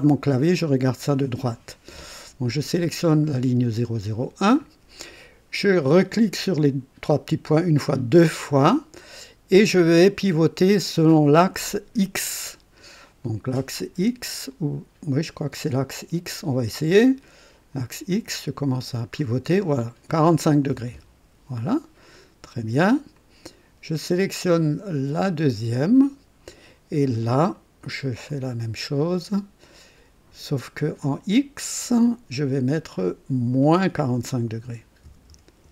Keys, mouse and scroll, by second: 3.7 click, 6.4 click, 7.9 click, 16.7-17.8 drag, 18.4-18.7 scroll up 1, 19.1-19.9 scroll up 2, 20.7 KP_4, 20.9 KP_5, 21.0 KP_5, 23.1 click, 23.4 typing, 25.1 click, 28.2 click, 29.0 click, 31.0 click, 31.9 click, 33.0 click, 34.6-35.7 typing.